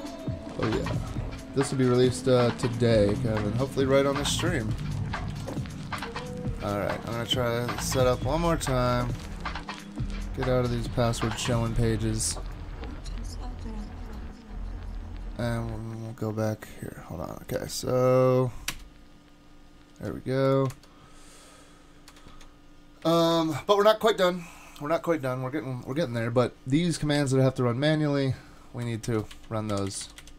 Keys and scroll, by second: 20.7 super+Tab, 22.1 super+Tab, 22.3 super+Tab, 23.2 shift+super+Tab, 23.3 shift+super+Tab, 29.1 shift+super+Right, 29.3 super+x, 29.9 Up, 30.0 Up, 30.2 Up.